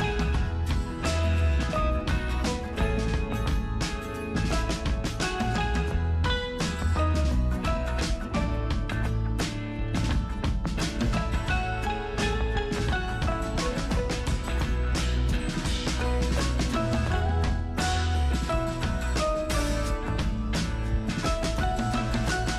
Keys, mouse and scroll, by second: 0.6 super+click.